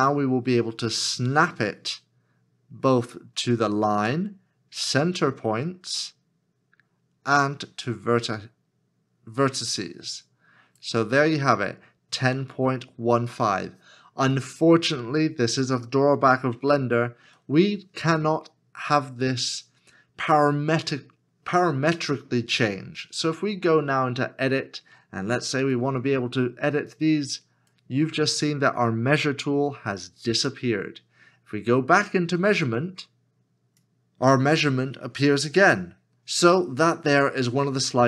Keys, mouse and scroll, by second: 16.7 shift+middle click.